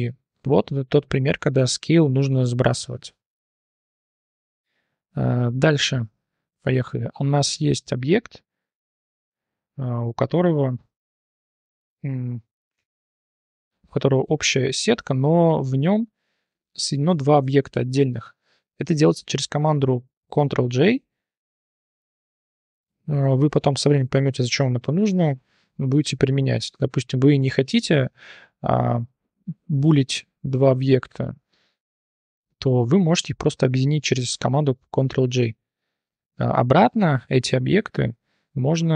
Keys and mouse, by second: 0.5-0.8 drag, 1.5 click, 2.6 drag, 4.2 shift+drag, 5.3 shift+drag, 5.7-6.0 drag, 6.5 click, 6.7 drag, 7.4 middle click, 8.2 middle click, 10.5 shift+middle drag, 10.9-11.2 middle drag, 12.7 Tab, 14.2 t, 15.5 drag, 16.6-17.0 drag, 17.8 click, 27.4 Escape, 27.7 Tab, 28.1 t, 28.4 click, 29.2 click, 30.3 click, 32.6-33.0 drag, 33.5-33.9 drag, 35.2-36.0 drag, 36.5 Tab, 37.0 a, 38.0 p.